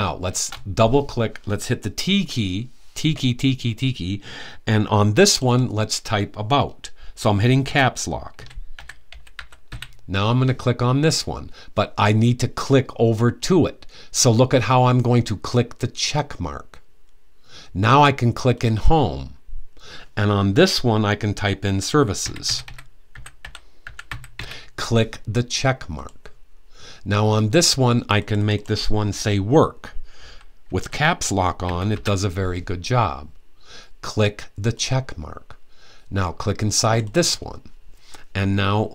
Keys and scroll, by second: 1.8 t, 7.8-9.9 typing, 21.7-24.5 typing, 30.1-31.6 typing.